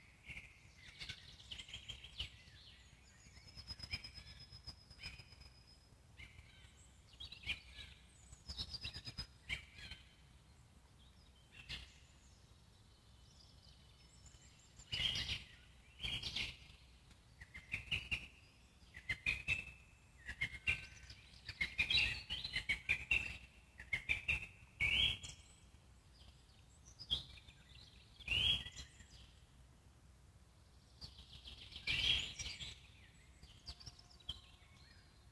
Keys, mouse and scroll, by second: 3.0 q, 3.6-4.3 scroll up 2, 5.3-7.1 drag, 7.5-8.0 scroll down 2, 8.0-10.1 alt+middle drag, 10.1-10.5 scroll down 4, 10.5 click, 10.7 scroll up 2, 10.8-14.5 alt+middle drag, 14.5 Tab, 16.2 click, 16.9-20.0 alt+middle drag, 20.0 shift+f, 21.4-23.2 alt+middle drag, 23.2 click, 23.5-24.5 alt+middle drag, 24.5 click, 25.2 alt+middle click, 25.9-27.8 drag, 27.8-29.2 alt+middle drag, 29.2-29.6 ctrl+z, 29.8 ctrl+z, 30.4-34.0 alt+middle drag, 34.0-35.3 drag.